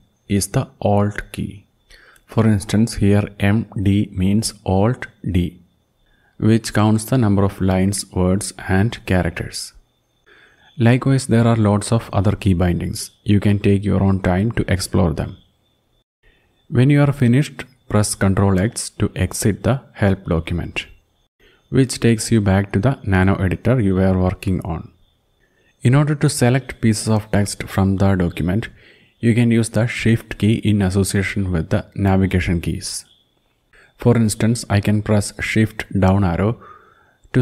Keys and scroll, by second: 0.9 Down, 1.1 Down, 1.3 Down, 1.5 Down, 1.7 Down, 10.3 Down, 10.7 Down, 10.9 Down, 11.1 Down, 11.3 Down, 11.5 Down, 11.7 Down, 11.9 Down, 12.1 Down, 12.5 Down, 12.8 Down, 13.4-14.2 Down, 14.5 Down, 16.7 Page_Up, 17.1 Page_Up, 17.2-18.3 Page_Up, 18.5 Page_Up, 20.7 ctrl+x, 27.4 shift+Right, 27.8 shift+Right, 28.2 shift+Right, 28.4 shift+Right, 29.8 shift+Left, 30.2 shift+Left, 30.4 shift+Left, 30.8 shift+Left, 33.4 shift+Down, 33.8 shift+Down, 34.2 shift+Down, 34.3 shift+Down, 34.5 shift+Down, 34.7 shift+Down, 34.9 shift+Down, 35.1 shift+Down, 35.3 shift+Down, 35.5 shift+Down, 35.9 shift+Down, 36.1 shift+Down, 36.3 shift+Down, 36.5 shift+Down, 36.7 shift+Down, 37.1 shift+Down.